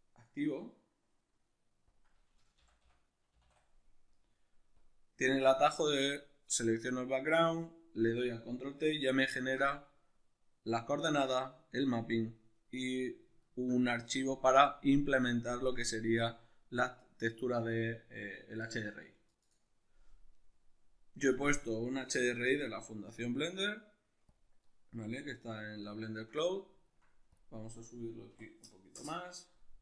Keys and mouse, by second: 6.2-19.4 middle drag, 19.4-20.7 drag, 20.7-21.6 middle drag, 21.6-25.1 drag, 25.1-27.3 middle drag, 27.3-29.8 drag, 28.9 Return.